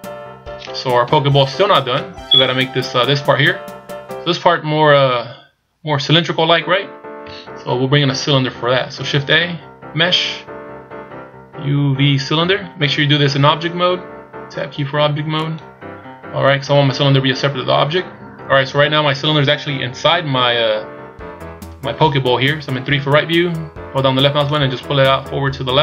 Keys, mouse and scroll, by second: 1.0 KP_1, 2.0 z, 7.2 z, 9.1 shift+a, 22.8 KP_3, 24.5 click.